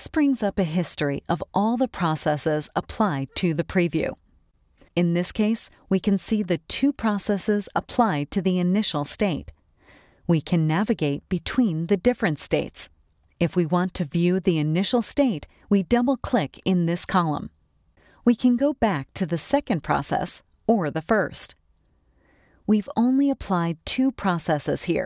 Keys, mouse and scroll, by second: 2.8 click, 3.9 click, 5.3 click, 16.0 click, 18.6 click, 20.8 click, 22.3 click, 24.1 click.